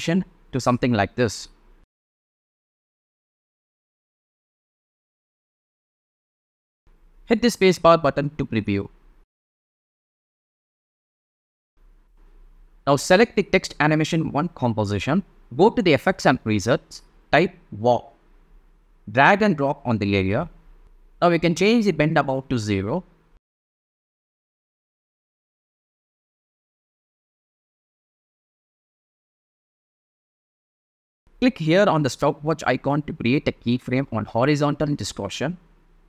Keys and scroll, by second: 0.2 shift+Down, 3.6 shift+Up, 5.9 shift+space, 11.4 space, 15.4-16.7 typing, 22.1 0, 22.3 Return.